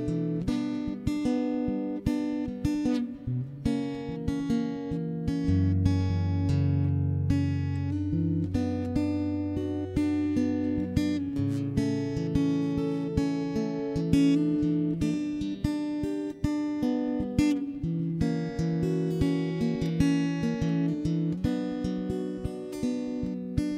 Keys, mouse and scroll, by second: 0.2 Escape, 0.3 x, 0.6 middle click, 2.0 ctrl+KP_1, 2.4 Tab, 2.5 right click, 2.7 shift+space, 3.5 right click, 3.6 click, 4.0 right click, 4.3 click, 4.5 right click, 5.0 z, 5.4 right click, 6.4 click, 6.8 middle click, 7.2 ctrl+s, 7.3 right click, 8.2 shift+d, 8.8 m, 9.1 middle click, 9.4 right click, 9.8 right click, 10.0 middle click, 10.2 click, 11.0 0, 11.2 right click, 11.4 click, 12.4 1, 12.6 right click, 12.8 Escape, 12.9 shift+space, 13.0 middle click, 14.1 middle click, 15.1 ctrl+KP_1, 15.8 ctrl+KP_3, 16.0 middle click, 16.1 ctrl+Tab, 16.3 v, 18.0 middle click, 18.6 right click, 19.1 click, 19.2 middle click, 19.4 right click, 19.4 click, 19.4 middle click, 19.6 Tab, 20.2 ctrl+KP_3, 20.3 middle click, 20.7 a, 21.3 a, 21.4 c, 22.3 right click, 22.4 Escape, 22.5 Escape, 22.6 middle click, 23.2-23.7 typing.